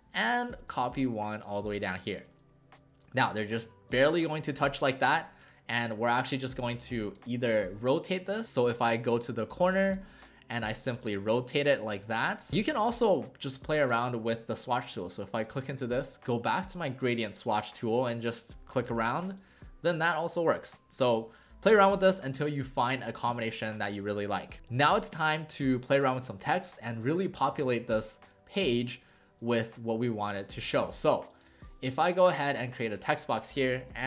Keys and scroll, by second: 3.6 w, 4.9 w, 7.1 space, 12.5 w, 24.5 w, 30.5 w, 33.7-34.0 typing.